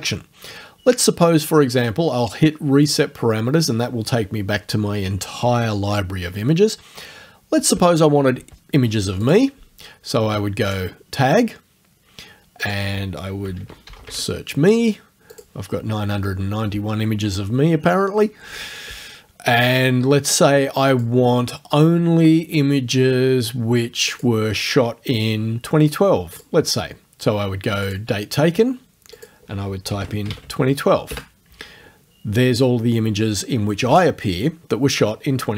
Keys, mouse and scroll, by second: 2.9 click, 9.3 click, 10.7 click, 12.6 click, 13.2-14.6 typing, 15.3 click, 20.9 click, 24.1 click, 26.4 click, 27.9 click, 29.2 click, 30.1 KP_0, 30.3 KP_1, 31.1 KP_Enter.